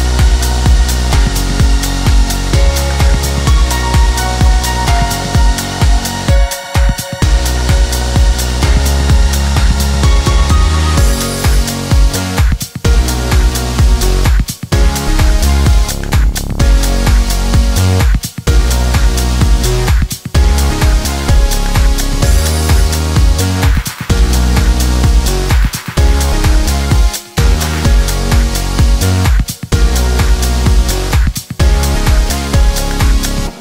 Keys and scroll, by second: 0.1 Delete, 2.7 Escape, 17.7 Escape, 20.6 5, 20.8 Return.